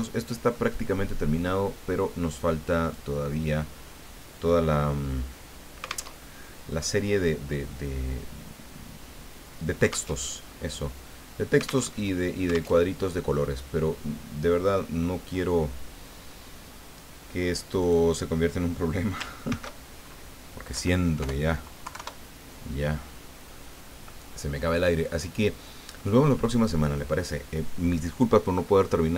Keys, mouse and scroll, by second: 0.5-1.6 ctrl+middle drag, 2.8 click, 4.1-4.5 scroll down 2, 6.1 alt+Tab, 10.2 alt+Tab, 11.8 alt+Tab, 12.8 alt+Tab, 17.8 click, 19.4 ctrl+shift+s, 20.7 Right, 21.8 KP_3, 21.9 KP_Enter, 25.4 middle click, 26.1 click, 26.5 click.